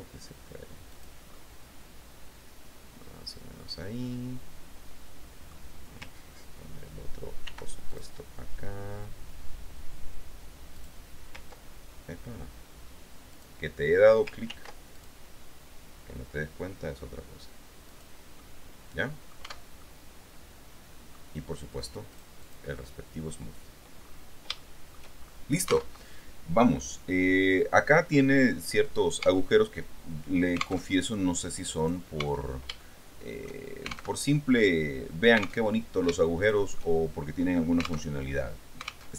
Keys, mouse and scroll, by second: 1.1 click, 1.5-5.9 middle drag, 7.6 ctrl+r, 8.1 ctrl+click, 13.5 click, 14.7 ctrl+r, 15.2 ctrl+scroll up 2, 18.0 click, 18.6-19.7 middle drag, 19.6 Tab, 20.0-21.5 middle drag, 22.3-23.3 drag, 24.2-24.5 scroll down 2, 24.8 shift+middle click, 25.3-25.9 shift+scroll up 3, 26.1 alt+Tab, 29.4 Tab, 31.1 alt+Tab, 32.0 right click, 32.4 Tab, 33.0-34.2 shift+middle drag, 34.4 alt+Tab, 35.9 alt+Tab, 36.4 shift+middle click, 38.3 alt+Tab.